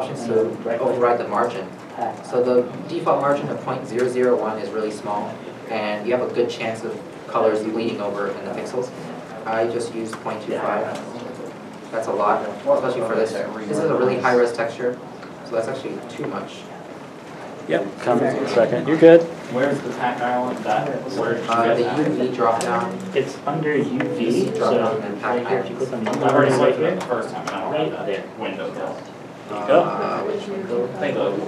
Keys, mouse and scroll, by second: 9.4 shift+middle click, 9.5 BackSpace, 9.9 BackSpace, 10.4 2, 11.0 Return, 16.7 Return, 16.9 Left, 17.5 0, 18.6 Return, 19.5 scroll up 1, 20.5 scroll down 1, 30.7-31.0 scroll down 1, 31.0 shift+middle click.